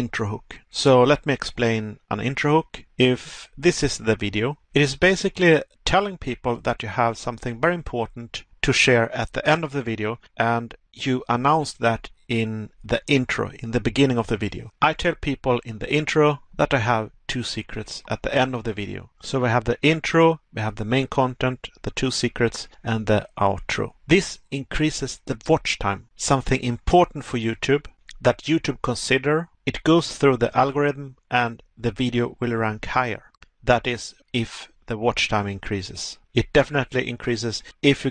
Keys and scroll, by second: 4.3 Pause, 16.7 Pause, 23.4 Pause, 33.1 Pause, 36.0 Pause.